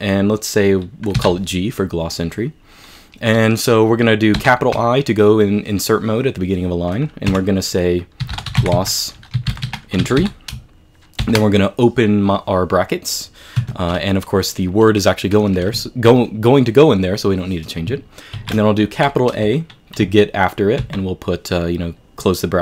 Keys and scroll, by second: 4.4 shift+i, 7.3-11.2 typing, 13.6 Escape, 18.4 typing, 20.6-21.3 typing.